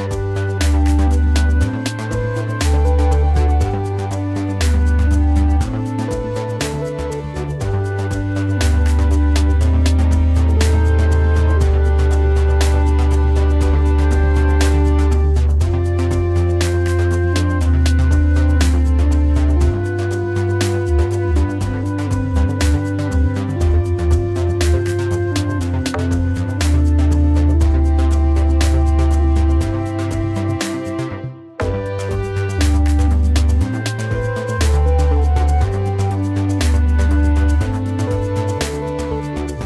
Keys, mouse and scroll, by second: 38.8 alt+shift+click.